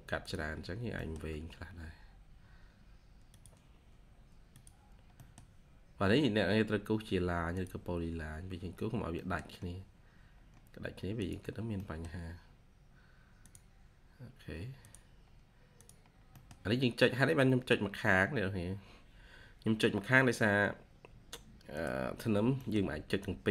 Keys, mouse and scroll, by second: 0.5-0.9 scroll down 1, 0.9 middle click, 1.5-2.6 scroll up 1, 5.0 middle click, 5.6-6.6 scroll up 1, 8.8-9.1 scroll down 1, 9.1 middle click, 10.3-11.4 scroll up 1, 11.4-11.7 scroll down 1, 11.7 middle click, 12.3-13.3 scroll up 1, 15.2-16.0 scroll up 1, 16.0 scroll down 1, 16.2 middle click, 16.8-17.8 scroll up 1, 17.9-18.8 scroll up 1, 22.1 scroll down 1, 22.5 middle click.